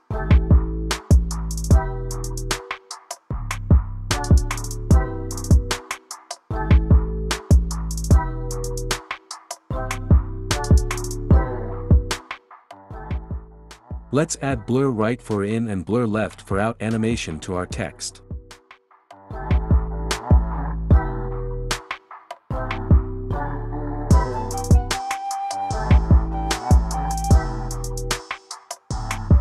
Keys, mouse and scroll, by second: 0.5 click, 3.5 click, 4.7 click, 7.5 click, 18.6 click, 21.2 click, 28.1 click.